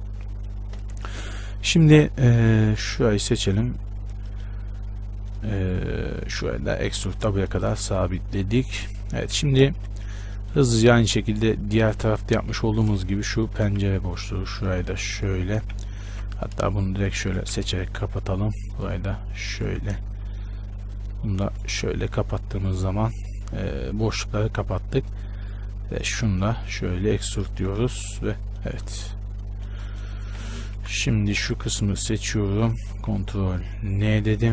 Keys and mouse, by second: 2.9-5.2 drag, 3.6-5.2 right drag, 6.4 e, 8.0 z, 9.9 shift+space, 12.0 click, 12.4 z, 12.7 z, 13.8 f, 15.8 f, 17.6 ctrl+z, 17.6 f, 19.8 f, 21.8 f, 25.3-28.0 drag, 26.4-28.0 right drag, 27.0 e, 28.0 Tab, 29.0 Tab, 29.9 z, 30.6 KP_1, 31.0 a, 31.3 b, 32.7 z, 34.2 ctrl+n.